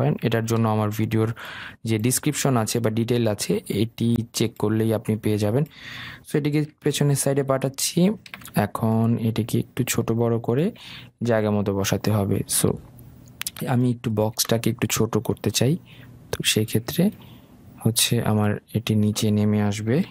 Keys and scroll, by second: 0.7 ctrl+g, 7.2 ctrl+shift+[.